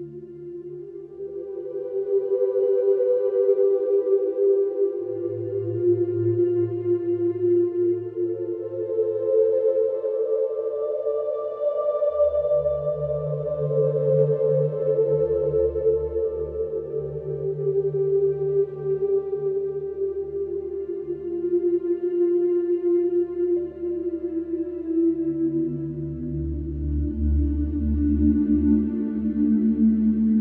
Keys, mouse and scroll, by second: 0.3 Delete, 2.1 click, 3.7 click, 6.0 typing, 6.5 Return, 8.8 Escape, 11.5 click, 14.5 click, 14.9 Escape, 15.9 click, 16.6 Escape, 18.6 click, 20.8 click, 21.7 Escape, 22.5 middle click, 25.0 click, 26.7 click, 27.0-27.6 scroll.